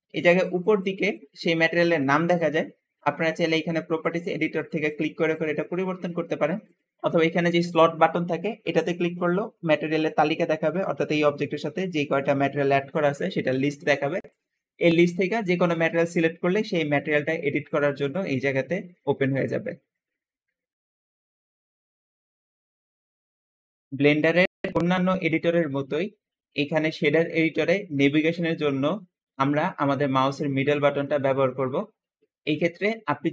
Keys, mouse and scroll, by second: 1.7 Escape, 17.3-18.7 middle drag, 18.8-19.6 scroll up 2, 19.2 middle click, 24.8-25.6 scroll down 2, 25.4-27.6 middle drag, 27.9-28.6 scroll up 1, 28.4 middle click, 29.2-30.9 middle drag, 29.2-30.1 scroll down 2, 31.2-32.8 middle drag, 31.2-31.8 scroll up 2, 31.8-32.6 scroll down 2.